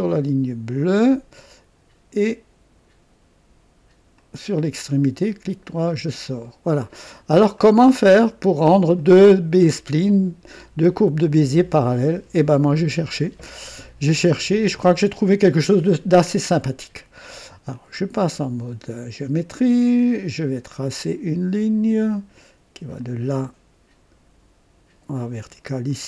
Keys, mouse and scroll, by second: 0.6 click, 4.1 click, 5.2 right click, 6.4 right click, 7.6 middle click, 8.5 scroll down 1, 9.0-10.3 right drag, 12.6 right click, 17.7 click, 20.7 click, 23.0 click, 25.1 click, 25.9 right click.